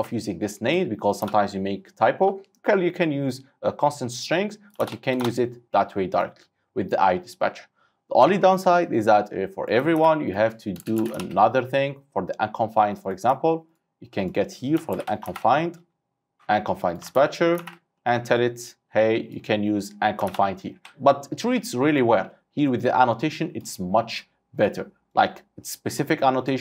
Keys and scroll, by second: 0.0 ctrl+c, 4.9 ctrl+v, 10.0 ctrl+c, 11.2 ctrl+c, 11.2 ctrl+v, 14.9 ctrl+shift+Left, 17.2 ctrl+w, 17.7 ctrl+c, 20.3 ctrl+v.